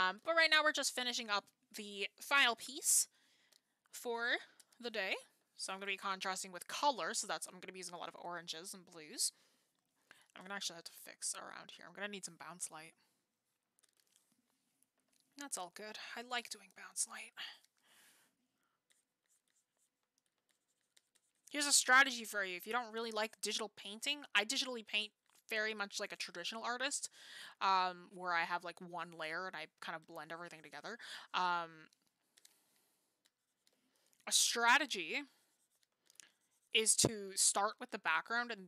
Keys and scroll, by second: 34.0 ctrl+z.